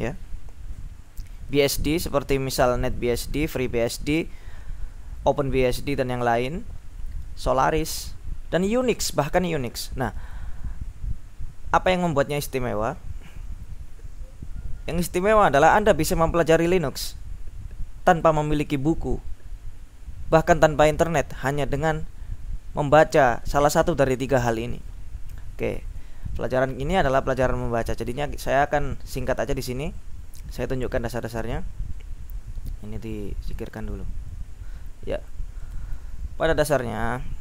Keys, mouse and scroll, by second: 25.8 ctrl+u, 28.5 click, 28.7 click, 33.3 click, 34.5-36.5 drag.